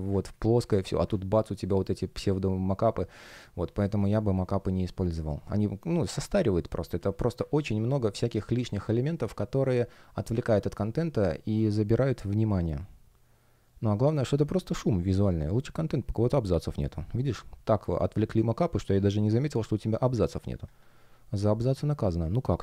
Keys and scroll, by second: 0.5 super+space, 2.7 space, 20.5 F1.